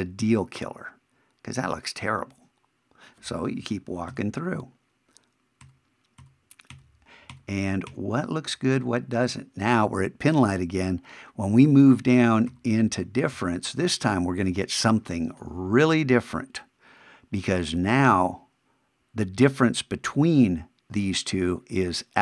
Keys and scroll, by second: 4.1 shift+=, 12.5 shift+=.